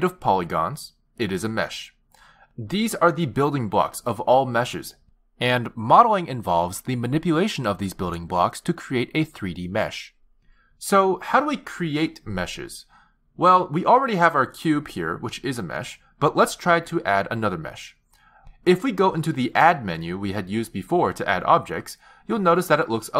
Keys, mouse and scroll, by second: 21.6 click.